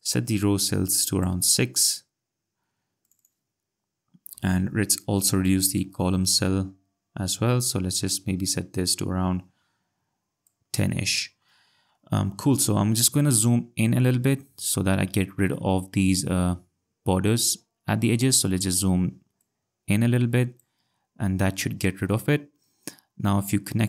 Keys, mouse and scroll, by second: 3.0 click, 4.3 6, 5.4 click, 12.4 ctrl+scroll, 14.8-15.5 scroll, 15.9-16.6 ctrl+scroll, 18.5 scroll, 19.4 click, 21.1 ctrl+scroll.